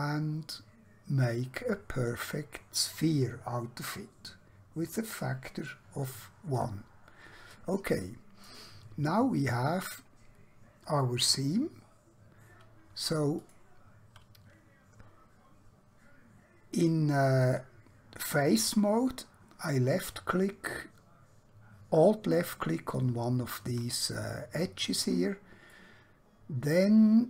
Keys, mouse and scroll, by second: 2.1 click, 6.7 click, 7.6 middle click, 9.1-11.3 scroll up 1, 11.3 3, 13.3 alt+click, 16.8 middle click, 25.7 middle click.